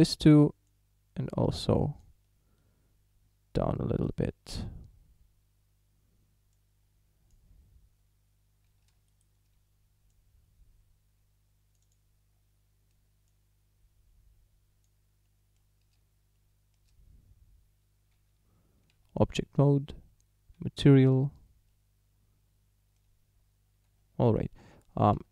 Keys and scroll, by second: 8.7 a, 18.3 Tab, 19.6 z, 24.4 Tab.